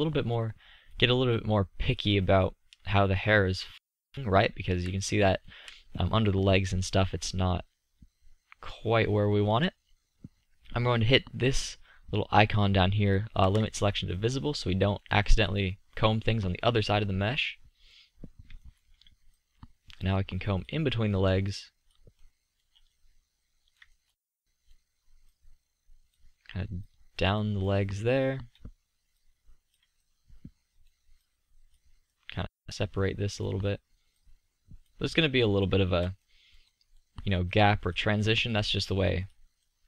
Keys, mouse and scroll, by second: 2.5 middle click, 2.7 middle click, 4.8 z, 8.1 z, 13.8-14.8 middle drag, 17.5-19.5 middle drag, 20.7 click, 22.2-23.0 middle drag, 36.1-37.8 middle drag.